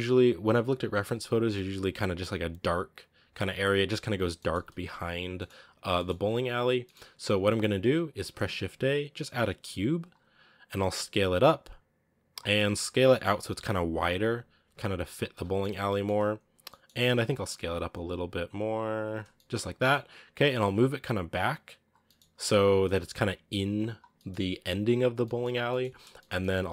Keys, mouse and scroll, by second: 4.4 scroll up 2, 5.0 scroll down 3, 5.2-6.6 middle drag, 6.6 scroll up 1, 6.8-7.4 middle drag, 7.4-8.0 scroll down 1, 8.0-8.4 scroll down 1, 9.9 shift+a, 10.2-10.7 scroll down 5, 10.7 s, 12.4 middle drag, 12.6-12.9 scroll up 1, 12.9 s, 14.4 scroll up 1, 14.5 s, 15.2-16.9 middle drag, 16.9 s, 17.8 s, 19.2-20.2 middle drag, 20.2 g, 21.9 middle click, 22.2 g, 24.0-25.3 middle drag, 25.3 scroll up 1, 25.5 middle click, 26.5 scroll up 1.